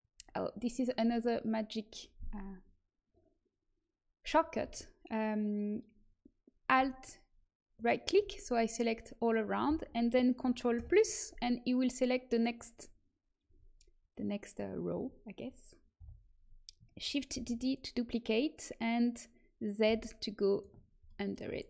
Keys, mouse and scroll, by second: 7.7-10.7 right drag, 10.7 ctrl+KP_Add, 15.9 KP_1, 17.2 shift+d.